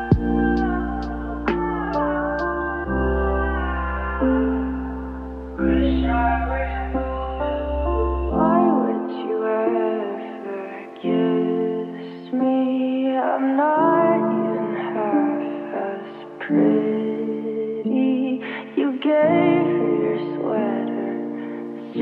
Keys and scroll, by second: 6.4 Return, 6.7 1, 8.5 Return, 8.7 2, 10.3 Return, 10.5 3, 10.8 Return, 12.5 4, 13.0 Return.